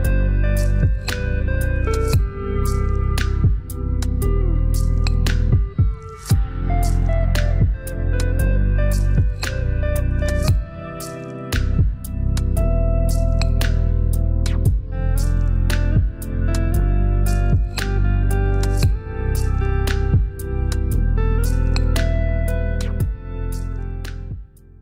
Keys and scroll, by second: 5.4 shift+Right, 16.6 shift+Right.